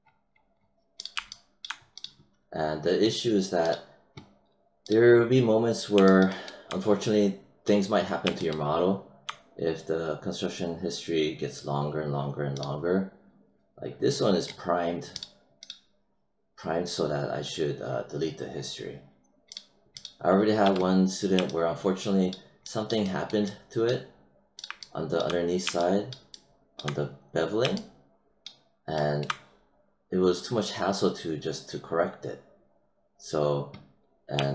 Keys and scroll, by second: 20.6 w.